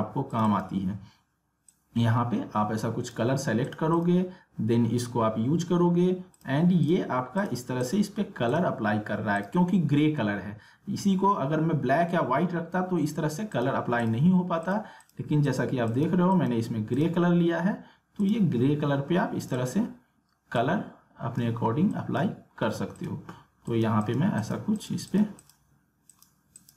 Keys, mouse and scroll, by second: 0.3-3.6 drag, 6.3 click, 13.5-26.7 drag.